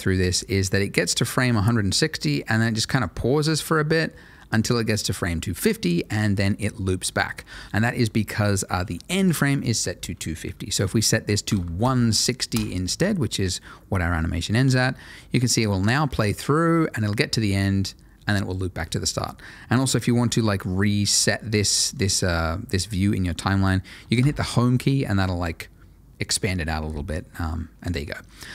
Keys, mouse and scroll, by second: 7.4 space, 7.6 Escape, 9.0 click, 11.4 1, 11.5 6, 11.8 0, 12.5 Return, 14.6 space, 21.4 middle click, 22.3 scroll down 1, 22.6 middle click, 24.1 Home.